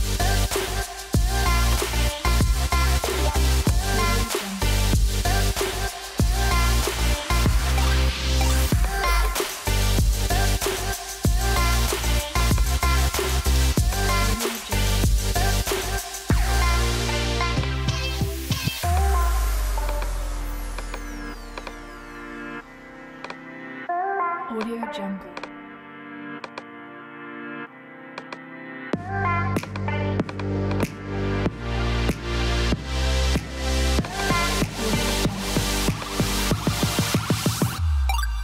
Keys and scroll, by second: 37.4-38.4 typing.